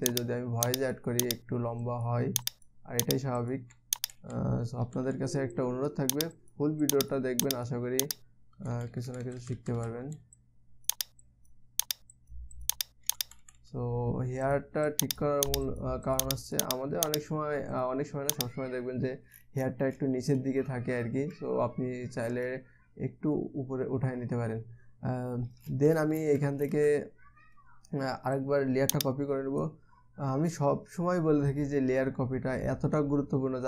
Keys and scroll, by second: 4.5 ], 4.8 ], 5.4 ], 5.6 ], 9.2-10.6 typing, 13.7 ], 13.9 ], 14.0 ], 14.2 ].